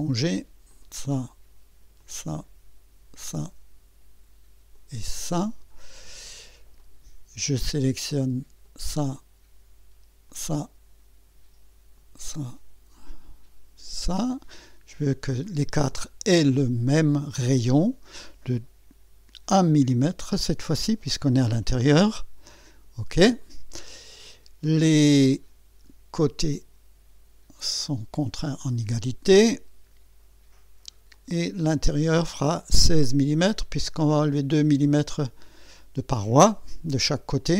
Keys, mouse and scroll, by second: 0.7 click, 2.0 click, 3.2 click, 4.7 click, 5.4 scroll up 1, 5.9 right click, 6.8 right click, 8.6 click, 10.3 click, 12.0 click, 13.9 click, 15.4 click, 17.1 click, 20.8 1, 22.7 click, 23.6 scroll up 1, 24.1 scroll down 1, 25.3 click, 26.5 click, 28.2 click, 31.1 click, 34.0 click.